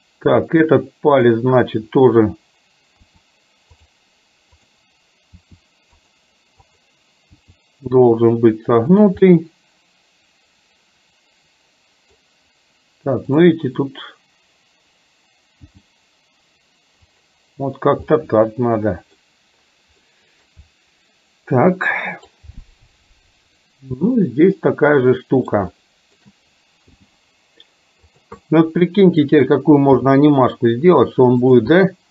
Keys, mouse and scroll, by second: 3.0 r, 4.5 click, 5.4 r, 6.7 click, 7.4 r, 9.4-12.2 middle drag, 13.4 click, 15.7 g, 18.2-19.3 middle drag, 20.2 middle click, 21.7-22.4 scroll up 1, 23.7 click, 24.2-25.5 middle drag, 25.8 shift+middle click, 27.0 g, 28.5-29.5 middle drag, 31.8-32.1 scroll up 1.